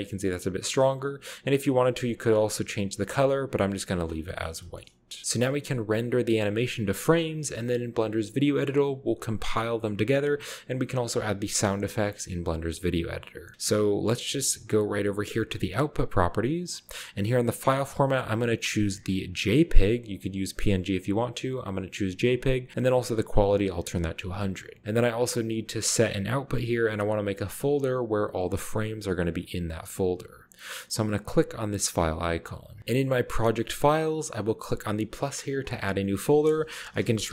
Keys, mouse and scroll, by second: 0.8-1.5 drag, 1.7 click, 2.0-3.3 middle drag, 4.4-4.9 shift+middle drag, 4.6-5.2 shift+scroll down 1, 15.6-16.7 drag, 17.7-18.1 drag, 19.6 click, 23.1 click, 35.6 middle click, 36.8-37.3 typing.